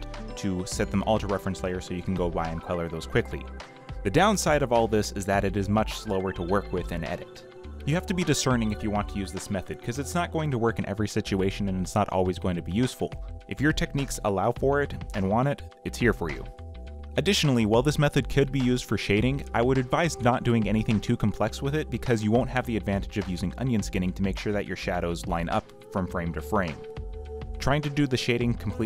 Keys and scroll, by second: 0.7 ., 2.4 ., 2.8 Delete, 3.3 ., 4.1 Delete, 5.2 Delete, 5.9 ., 6.6 Delete, 6.9 ,, 10.3 g, 10.5 ctrl+d, 12.2 g, 13.3 g, 21.1 a, 21.3 ctrl+x, 21.6 ctrl+v, 22.0 ctrl+d, 22.8 ctrl+z, 23.6 g.